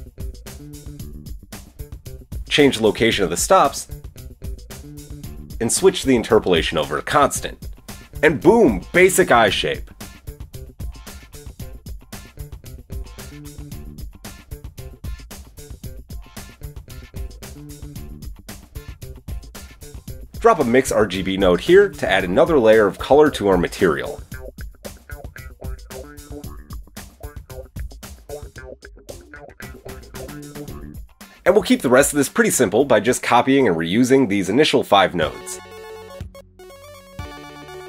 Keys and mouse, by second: 2.4-15.0 drag, 20.3 shift+a, 23.2 click, 23.5-25.0 middle drag, 25.0-26.4 drag, 26.4-27.5 middle drag, 27.5-37.8 drag, 37.0 shift+d.